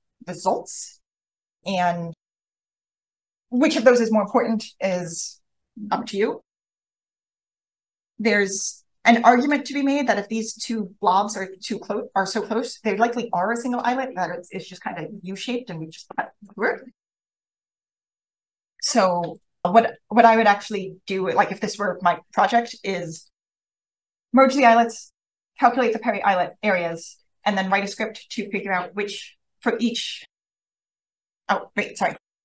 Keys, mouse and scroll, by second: 2.5-8.2 scroll up 1, 8.2-12.3 scroll down 1, 12.3 scroll down 1, 18.5-19.0 scroll down 1, 19.3-19.6 drag, 31.8 click, 31.9 click.